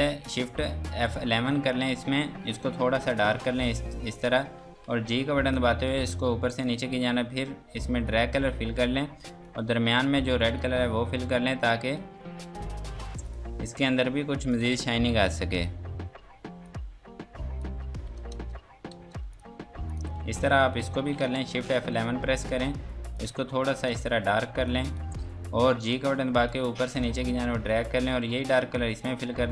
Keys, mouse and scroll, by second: 1.1 shift+F11, 2.7 click, 5.0 g, 5.5 click, 18.4 ctrl+space, 19.3 click, 20.2 F2, 20.4 click, 21.8 shift+F11, 23.1 click, 25.5 g, 25.9 click.